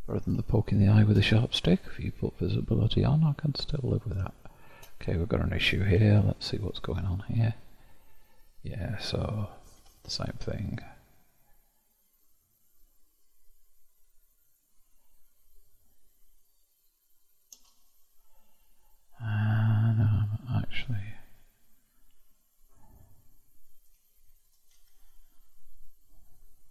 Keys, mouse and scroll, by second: 0.4-1.7 shift+middle drag, 1.7 click, 2.5-3.5 scroll up 1, 3.5-4.3 scroll up 2, 4.3-6.0 shift+middle drag, 6.0 Tab, 6.7-8.8 scroll up 1, 8.8-9.7 scroll up 1, 9.7 k, 15.9-16.7 scroll up 1, 16.7-18.9 scroll up 1, 22.6 click, 23.0-24.3 middle drag, 24.3 shift+click, 24.7 k.